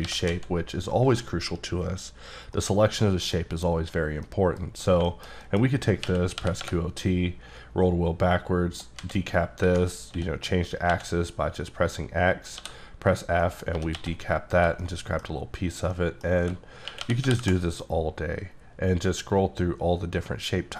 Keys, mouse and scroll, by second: 0.0 g, 0.3 z, 1.1 click, 2.6 middle click, 4.2 middle click, 5.1 middle click, 5.4-6.0 scroll up 1, 6.0 q, 6.4 o, 6.6 t, 7.3-9.0 scroll down 1, 9.0 z, 10.1-10.9 typing, 12.6 f, 13.1 click, 13.4 middle click, 13.7 typing, 14.5 click, 14.8 middle click, 15.9 middle click, 16.9-17.2 typing, 17.5 KP_Subtract, 18.3-20.2 scroll down 2, 20.2 scroll down 2, 20.5-20.7 scroll up 1.